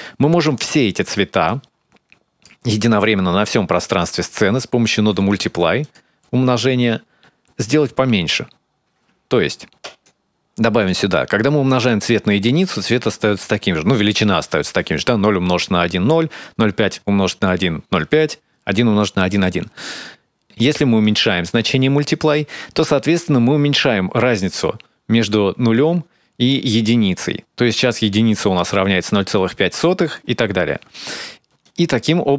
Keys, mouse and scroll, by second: 1.3 click, 5.1 click, 9.6 ctrl+shift+click, 10.4 click, 20.9 shift+click, 31.4 click.